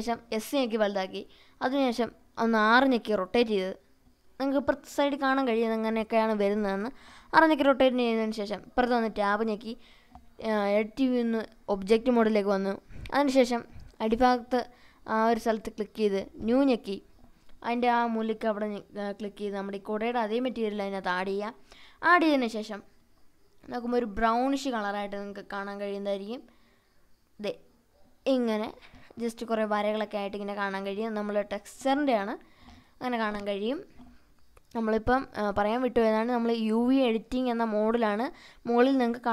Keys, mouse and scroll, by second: 0.1 click, 1.6 r, 6.0 click, 6.9-7.4 scroll down 1, 7.4-8.2 scroll up 1, 8.2 Tab, 9.7-10.8 middle drag, 11.9-12.9 drag, 15.0 click, 15.7-17.1 drag, 17.9 click, 22.3 Tab, 23.1 Tab, 23.5-24.4 drag, 25.3-25.7 scroll up 2, 26.7-30.4 middle drag, 26.7 scroll up 1, 31.2-34.4 middle drag, 34.5-35.9 scroll down 7, 35.9 middle click.